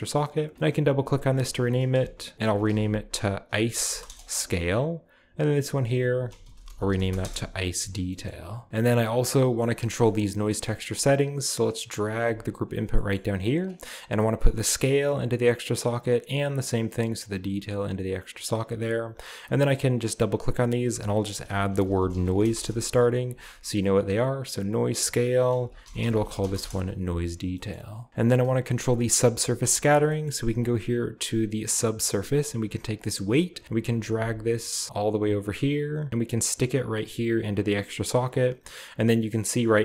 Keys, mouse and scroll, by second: 2.7 typing, 3.7 typing, 4.1 Return, 5.0-6.4 drag, 6.4-7.2 typing, 8.1 middle click, 8.4-9.1 typing, 8.8-10.0 scroll down 2, 9.1 middle click, 10.1 middle click, 11.2-12.8 drag, 13.2-14.6 scroll up 1, 14.6-15.8 drag, 17.3-18.8 drag, 20.0 click, 20.2 click, 20.7 click, 21.5 shift+click, 21.7-22.4 typing, 22.6 Return, 23.5 click, 23.7 typing, 24.6 click, 25.4-29.4 typing, 27.8 middle click, 28.1 click, 28.4-30.3 scroll down 1, 28.8-29.7 drag, 29.9 middle click, 30.3-31.7 middle drag, 30.3-31.7 scroll up 1, 33.2-38.4 drag.